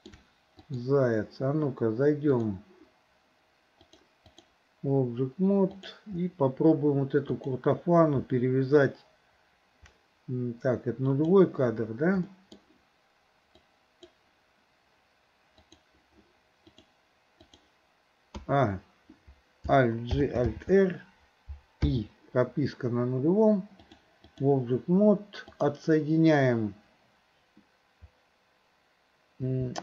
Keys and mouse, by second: 0.6 click, 2.4 click, 3.8-4.5 drag, 7.3 click, 11.2 click, 12.3 middle click, 13.7 click, 15.6 click, 16.7-17.6 drag, 18.4 a, 20.2 alt+g, 20.5 alt+r, 21.9 i, 23.9-24.5 drag, 25.5 click.